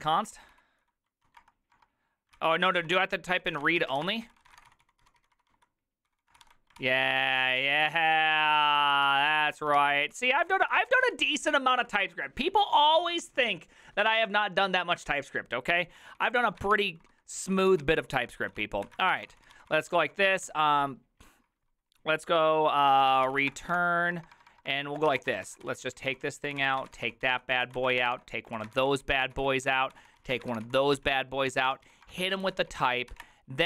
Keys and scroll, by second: 0.0-12.0 typing, 2.4 ctrl+c, 16.4-20.5 typing, 23.0-33.6 typing, 23.8 Return.